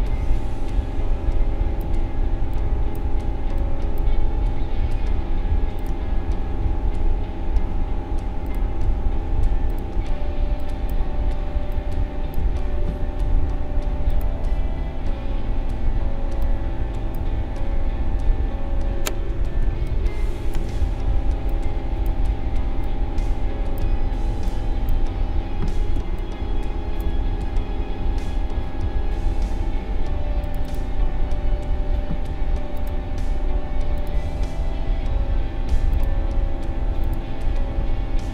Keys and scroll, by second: 19.6 space, 25.9 space.